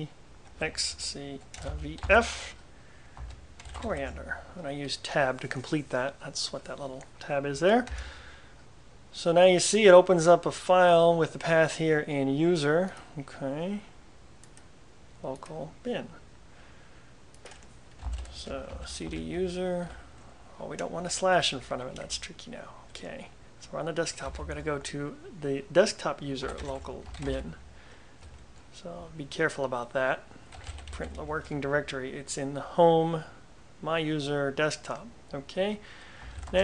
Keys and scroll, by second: 0.0-4.5 typing, 8.0 Return, 17.8-20.4 typing, 21.5 Tab, 21.7-22.1 typing, 24.4 typing, 24.5 Tab, 26.3-27.9 typing, 28.3 Return, 30.4-31.5 typing, 36.1-36.6 typing.